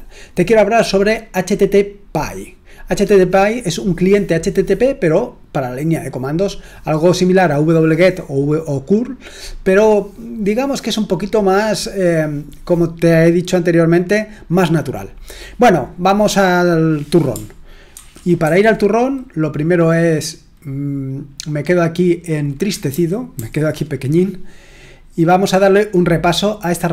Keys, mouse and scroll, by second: 17.9 ctrl+2, 18.4 ctrl+1, 22.9 super+h, 23.3 super+h, 25.5-26.9 scroll down 4.